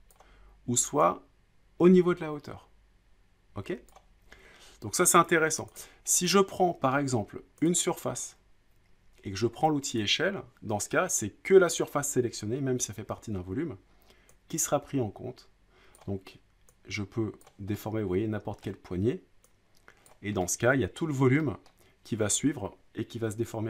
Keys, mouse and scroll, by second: 0.1 click, 3.9 click, 5.1 click, 5.8 click, 6.6 scroll, 6.8 scroll down 2, 7.1 middle click, 7.7 click, 10.0-11.1 drag, 15.9-17.1 drag, 17.4-18.3 drag, 18.6 middle click, 20.1 click, 21.0 middle click, 21.7 middle click.